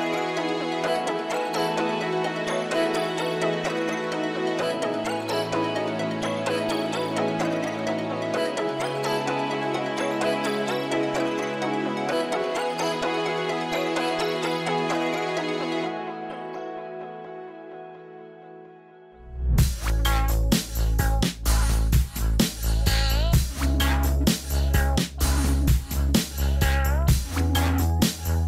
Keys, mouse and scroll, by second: 0.7 middle click, 0.8 scroll down 1, 1.0 middle click, 1.8 scroll down 1, 2.5-2.8 scroll up 1, 2.9 middle click, 4.1-6.1 scroll down 1, 14.3 scroll down 1, 14.4 middle click, 15.1-15.6 scroll up 1, 15.8 scroll down 1, 16.9 right click, 23.5 right click, 23.5 scroll up 1, 25.0 right click.